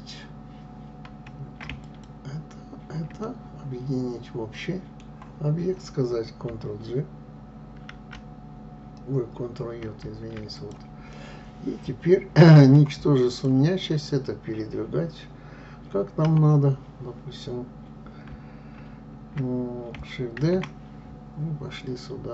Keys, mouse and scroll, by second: 3.4-7.8 middle drag, 7.8 ctrl+g, 9.8 ctrl+j, 10.5 click, 11.2-13.5 middle drag, 13.5 click, 16.1 KP_7, 20.5 shift+d.